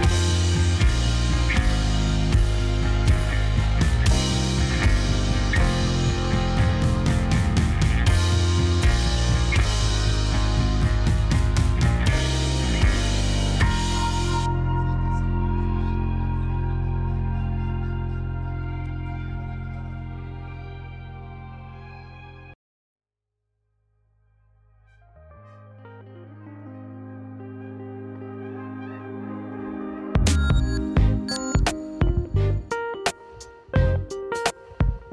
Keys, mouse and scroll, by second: 0.8 click, 1.0-2.5 middle drag, 2.5 click, 3.5 s, 4.8 click, 5.0 middle click, 5.6 click, 6.4 g, 7.6 click, 7.7-9.4 middle drag, 9.4 click, 9.5 middle click, 10.2 Tab, 10.4 right click, 10.8 click, 10.9-11.6 middle drag, 11.6 scroll down 2, 11.8-13.3 middle drag, 13.3 click, 13.4 click, 13.7-14.4 middle drag, 14.4 click, 16.0 s, 16.7 middle click, 17.0 drag, 17.2-18.1 middle drag, 18.1 click, 18.6 g, 19.5 click, 19.7 middle click, 20.8 g, 22.6 drag, 22.7-23.3 middle drag, 23.3 drag, 26.9 click, 27.5-28.5 scroll up 2, 28.9 g, 31.3 g, 34.1 s.